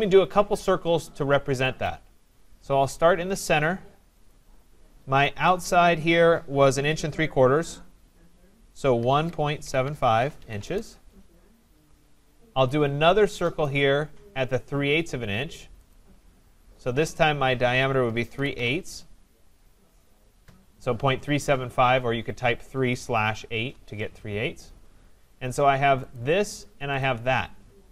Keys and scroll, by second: 10.6 Return, 20.4 Return.